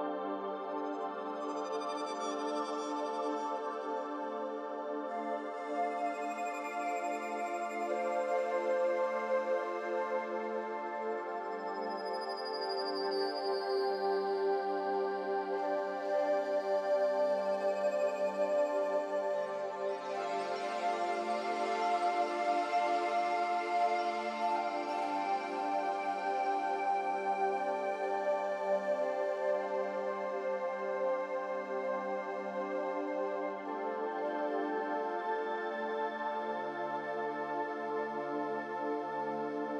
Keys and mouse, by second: 0.0 Tab, 0.9-3.1 middle drag, 3.3 middle click, 5.5 Tab, 6.0 click, 9.2 shift+click, 11.4-12.2 middle drag, 15.0 shift+click, 17.7 shift+click, 18.3 shift+click, 19.5 shift+click, 20.4 shift+drag, 21.4 shift+drag, 22.1 shift+click, 23.0 shift+click, 23.9 shift+click, 24.8 shift+click, 25.4-27.3 shift+drag, 28.7 middle click, 30.5 g, 33.4 ctrl+z, 39.4 click.